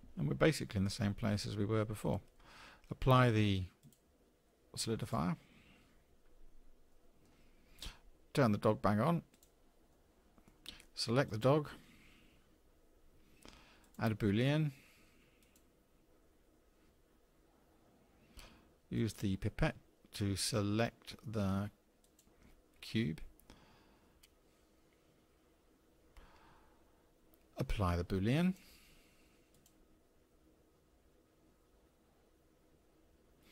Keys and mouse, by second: 3.9-5.1 drag, 6.9-7.2 drag, 9.3 click, 9.9 click, 11.3 click, 15.6-20.5 drag, 28.4-33.0 drag.